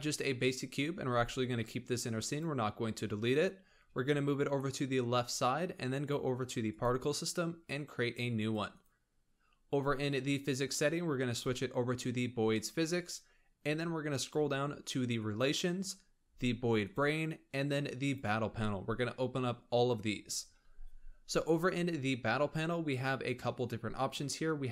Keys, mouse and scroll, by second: 1.0 g, 6.7 click, 8.3 click, 8.7-13.4 drag, 13.4-15.0 scroll down 8, 15.1-15.8 drag, 15.8-16.8 scroll down 3, 16.8-18.8 drag, 18.8-20.1 scroll down 4.